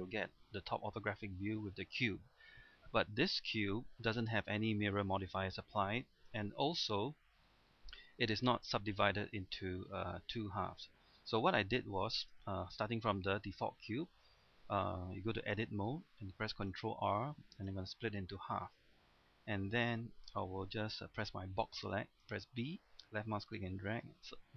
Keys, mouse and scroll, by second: 2.7 middle click, 3.3-4.5 scroll up 1, 4.5 middle click, 6.7 Tab, 7.3 scroll up 1, 7.9 middle click, 11.2-11.5 scroll down 1, 11.5 middle click, 12.4 Tab, 12.7-14.6 middle drag, 15.4 Tab, 15.9-16.4 scroll up 1, 16.7 ctrl+r, 18.0-19.7 middle drag, 22.3 b, 23.0-24.5 drag.